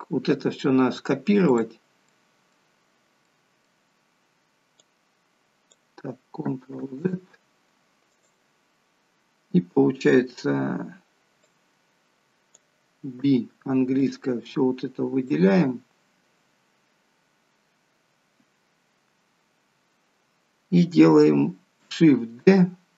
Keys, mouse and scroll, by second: 1.5 click, 2.0 middle click, 2.7-3.4 scroll down 2, 3.2 middle click, 4.8 click, 6.9 ctrl+z, 8.1 click, 11.4 click, 13.2 b, 16.9-17.8 scroll up 2, 18.6-20.1 scroll down 1.